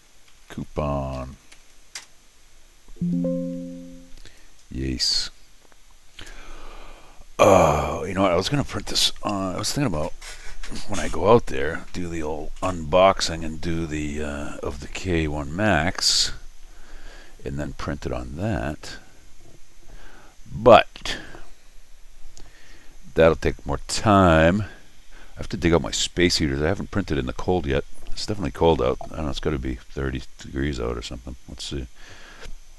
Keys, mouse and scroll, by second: 0.0-1.7 typing, 2.0 Return, 4.3 click.